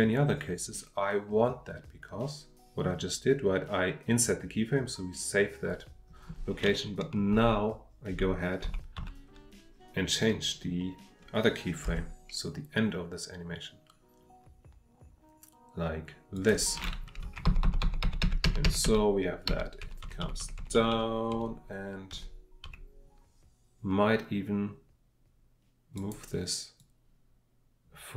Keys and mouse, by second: 16.3 click, 25.9 click, 26.8-28.1 drag.